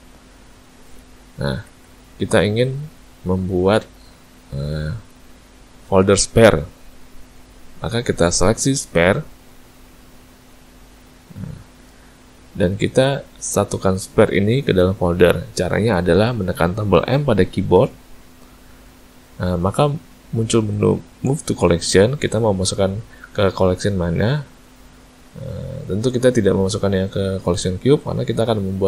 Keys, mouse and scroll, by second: 0.0 click, 1.6 a, 1.8 a, 8.7 click, 9.6 shift+click, 10.6 click, 11.4 shift+click, 17.8 m.